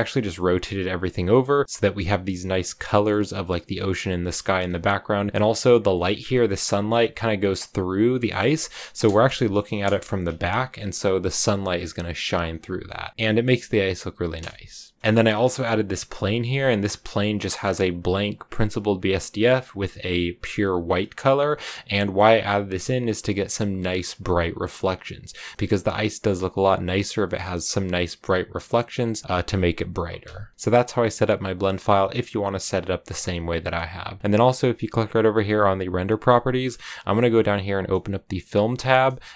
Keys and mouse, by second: 2.9 middle click, 3.9 middle click, 5.3 click, 6.6 middle click, 8.2 shift+middle click, 8.4 middle click, 8.5 click, 9.8 KP_0, 12.5 click, 14.9 click, 14.9 KP_0, 15.8 click, 16.6 click, 17.4 middle click, 19.0 click, 21.4 click, 31.4 click.